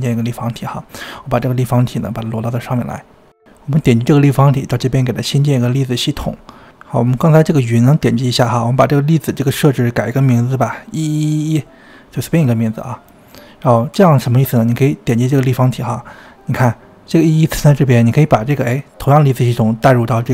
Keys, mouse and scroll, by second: 1.2 g, 2.2 g, 4.0 click, 5.5 click, 7.3 click, 9.4 click, 12.2 1, 12.3 1, 14.6 click, 16.4 click, 19.0 click.